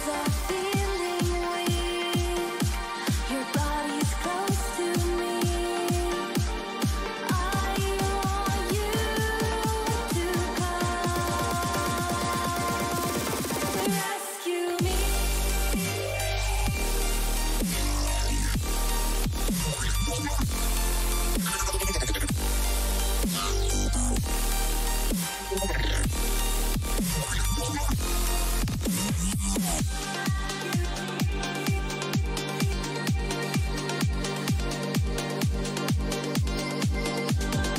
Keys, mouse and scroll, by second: 30.9 KP_3, 32.7-35.5 middle drag.